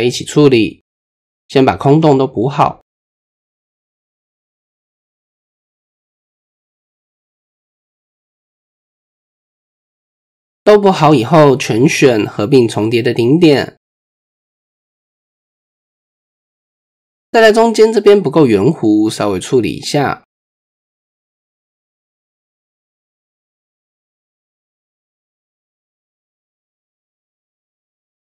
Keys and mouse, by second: 0.3 shift+middle click, 0.7 middle click, 1.5 shift+click, 2.8 ctrl+click, 3.3 ctrl+click, 6.5 e, 8.7 middle click, 9.5 middle click, 10.0 middle click, 10.6 a, 11.6 m, 12.9-14.3 middle drag, 14.8 middle click, 16.1 click, 16.4 middle click, 17.2 Tab, 18.3 Tab, 18.7-19.1 middle drag, 19.5 click, 21.8 click, 22.7 ctrl+click, 23.1 middle click, 25.1 g, 27.0 KP_1.